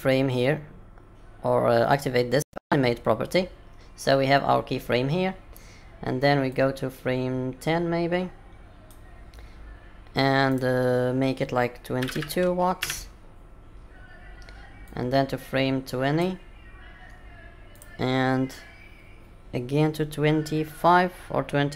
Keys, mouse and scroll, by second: 2.9 click, 6.5 click, 10.5 click, 12.1 KP_2, 14.8 click, 17.7 click.